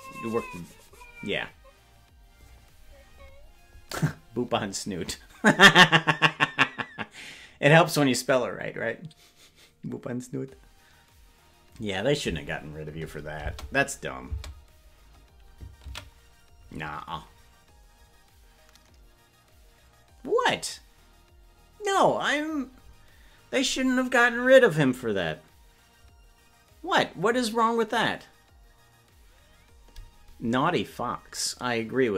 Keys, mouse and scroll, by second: 14.4 space, 20.2 ctrl+s.